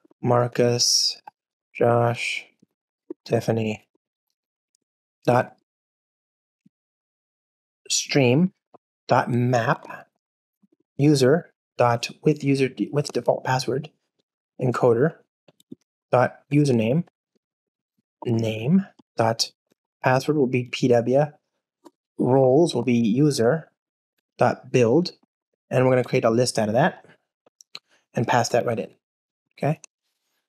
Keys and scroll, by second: 6.7 alt+Return, 7.5 ctrl+space, 8.2 Return, 9.0 Return, 11.1 Return, 13.0 Return, 14.6 Return, 25.9 Return.